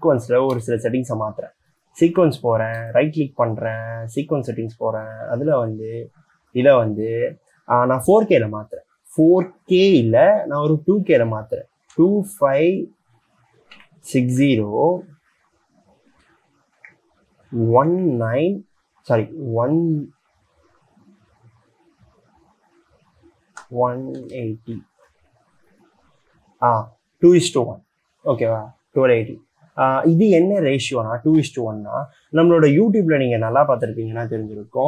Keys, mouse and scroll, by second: 0.8 right click, 3.1 right click, 12.2 2, 13.7-15.0 typing, 17.0 Tab, 18.1 1, 23.8-25.1 typing.